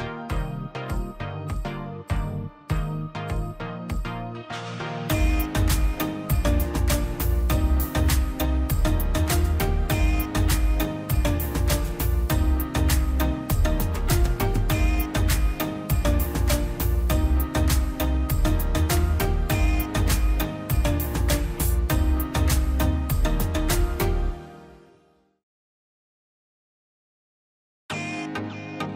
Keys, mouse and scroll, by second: 0.1 scroll down 1, 0.2 middle click, 0.5 scroll up 1, 0.8 p, 1.5 click, 1.9-2.6 scroll down 2, 2.1 click, 2.6 middle click, 2.7 scroll up 1, 4.0-5.3 drag, 5.9 ctrl+s, 6.4 scroll down 1, 6.7 middle click, 7.0 scroll down 1, 7.3 middle click, 7.7 click, 9.0-14.0 drag, 14.4 ctrl+z, 14.6 middle click, 15.1-15.6 scroll up 1, 15.8-18.1 drag, 18.2 scroll down 1, 18.5 middle click, 19.6-20.0 scroll up 1, 20.0-20.7 scroll down 2, 20.0 middle click, 20.7 middle click, 21.1 scroll down 1, 21.4 middle click, 21.9 click, 22.2 scroll up 1, 22.9 click, 23.1 scroll up 1, 23.9 click, 24.2-25.0 scroll down 1, 25.8 Escape, 26.1 ctrl+z, 26.5 l, 26.8-27.3 scroll up 1, 27.6 ctrl+y, 27.7-28.0 scroll up 1, 28.0 click.